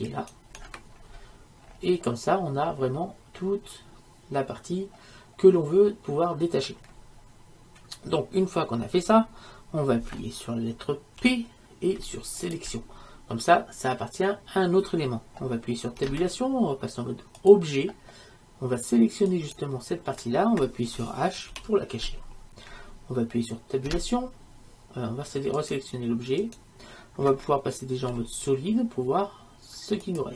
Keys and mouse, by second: 0.2 right click, 1.1 middle click, 1.2 right click, 1.3 middle click, 2.1-11.3 right drag, 11.3 p, 16.1 Tab, 19.4-21.6 right drag, 21.6 h, 24.0 Tab, 26.5 right click, 28.2 z.